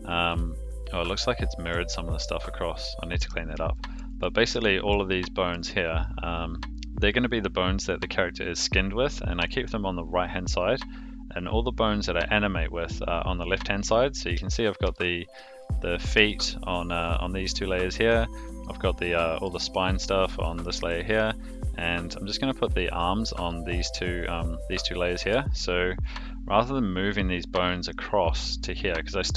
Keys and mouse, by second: 1.3-1.7 middle drag, 3.7 shift+middle click, 4.2 middle drag, 4.6 shift+middle drag, 5.1-5.5 middle drag, 13.8 click, 14.5 shift+click, 14.9-15.4 shift+middle drag, 16.3 shift+middle drag, 18.2 click, 18.6-19.4 middle drag, 21.4 click, 21.8 click, 22.1 click, 22.4 click, 22.7 click, 23.0 click, 23.4 click, 23.6 click, 23.9 click, 24.2 click, 24.8-25.3 middle drag, 26.0 click, 28.6 click.